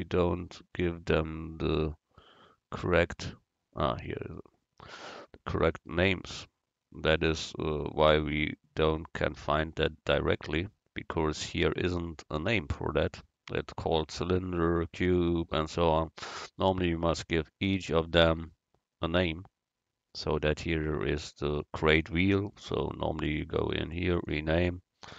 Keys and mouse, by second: 3.8 click, 4.0 right click, 5.7-7.6 drag, 12.7 KP_Decimal, 15.9-17.8 middle drag, 17.8 right click, 19.3 KP_Decimal.